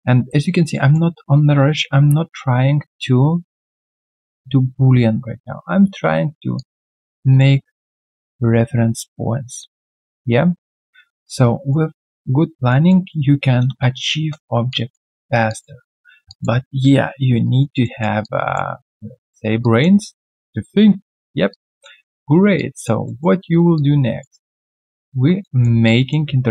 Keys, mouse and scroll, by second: 0.7 alt+middle click, 6.5 ctrl+click, 7.3 alt+middle click, 7.8 alt+right click, 9.7 ctrl+click, 10.5 alt+right click, 11.0 alt+middle click, 11.4 alt+right click, 12.0 alt+middle click, 12.5 alt+right click, 12.8 alt+middle click, 13.6 space, 14.1 space, 14.7 alt+click, 15.1 alt+right click, 15.5 alt+click, 15.8 alt+middle click, 16.3 alt+click, 16.6 alt+middle click, 17.4 alt+right click, 17.8 alt+middle click, 18.2 alt+click, 18.8 alt+middle click, 19.1 alt+right click, 19.6 alt+click, 20.0 alt+middle click, 20.3 alt+right click, 21.0 alt+middle click, 21.5 alt+click, 21.8 alt+middle click, 22.1 alt+right click, 22.5 alt+click, 23.0 alt+middle click, 23.4 alt+right click, 23.7 alt+click, 25.4 alt+middle click, 25.8 alt+click.